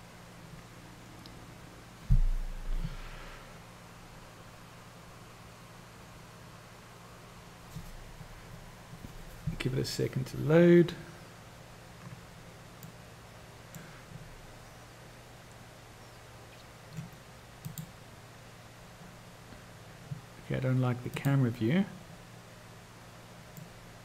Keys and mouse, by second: 13.2-14.0 middle drag, 17.8 click, 21.3 drag, 23.9-24.0 middle drag.